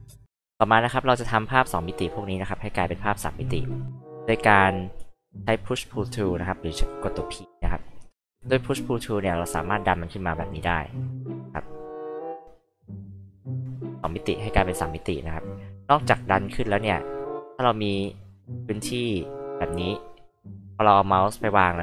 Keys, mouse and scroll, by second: 6.7 alt+p, 7.3 alt+click, 9.5-10.8 alt+drag, 11.3-12.3 alt+drag, 12.5 alt+click, 13.6 alt+click, 14.7-15.8 alt+drag, 16.3 alt+click, 17.2 alt+click, 18.0 alt+click.